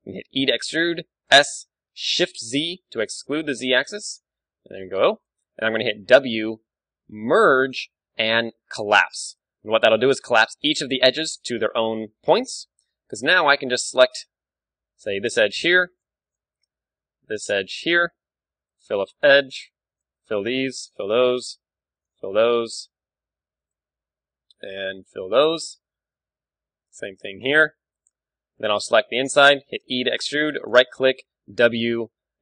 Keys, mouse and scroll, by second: 0.4 e, 5.3-7.2 drag, 6.1 w, 10.0-10.4 scroll up 1, 10.4-12.8 middle drag, 12.4 ctrl+Tab, 14.2-25.9 right drag, 18.1 f, 18.4 a, 20.4 f, 22.3 f, 25.4 f, 25.6 a, 25.9-27.9 middle drag, 27.9-29.4 right drag, 28.4 f, 29.4-30.5 middle drag, 30.0 e, 30.5 click, 31.1-32.4 right drag, 31.1 w.